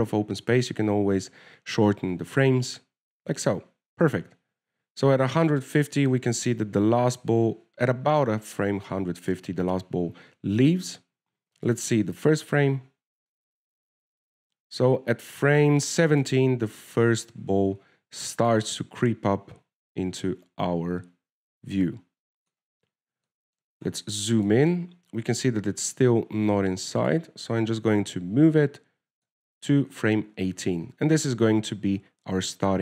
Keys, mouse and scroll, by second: 4.6 alt+a, 7.3 click, 13.0 click, 14.6 click, 19.8 click, 24.2 scroll down 1, 24.4 scroll up 4, 24.6 shift+middle click, 25.1-27.2 scroll up 5, 25.6 shift+middle click, 27.2 scroll up 1, 28.4 click, 32.1-32.8 scroll down 13.